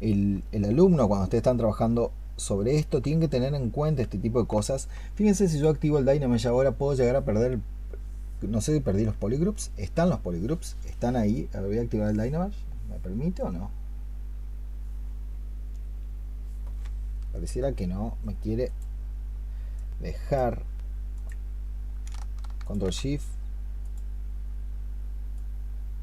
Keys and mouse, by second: 0.2 alt+click, 0.9 shift+click, 22.5 ctrl+shift+click.